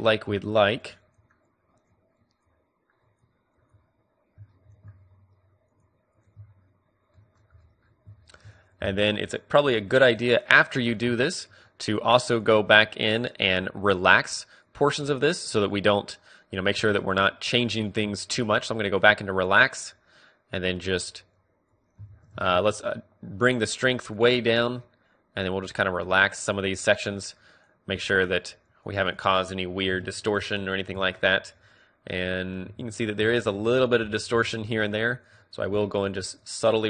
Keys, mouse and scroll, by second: 0.9-7.3 drag, 7.3 middle click, 8.1-11.6 middle drag, 11.6 click, 12.8-21.0 drag, 21.0 middle click, 21.0 f, 21.4-24.2 drag, 22.2 ctrl+z, 24.2 shift+f, 24.6-26.5 drag, 27.0-29.8 drag, 29.8-32.8 middle drag, 29.9-31.0 drag, 30.0 Tab, 32.8 Tab, 33.9-35.0 middle drag, 35.0-36.8 drag.